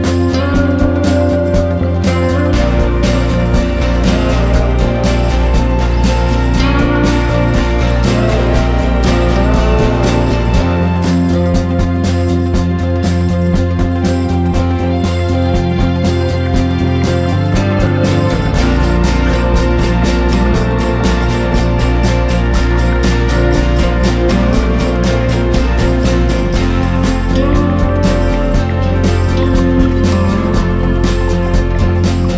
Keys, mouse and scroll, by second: 0.0 shift+click, 0.2 shift+click, 1.3 ctrl+g, 2.6 click, 5.8 ctrl+shift+g, 6.6 click, 7.8 ctrl+shift+g, 8.3 click, 8.8 ctrl+shift+g, 9.4 click, 9.9 ctrl+shift+g, 10.4 click, 19.0 F4, 19.6 click, 19.8 F4, 20.2 click, 22.5 F4, 22.9 click, 23.1 F4, 23.4 click, 23.6 F4, 23.9 click, 26.8 F4, 27.3 click, 29.8 F4, 29.9 click, 30.1 F4, 30.4 click, 30.5 F4, 31.1 click.